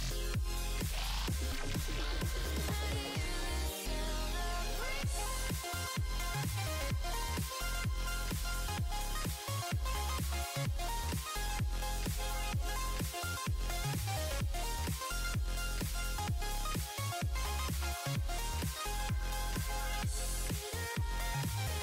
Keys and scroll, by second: 10.1 s.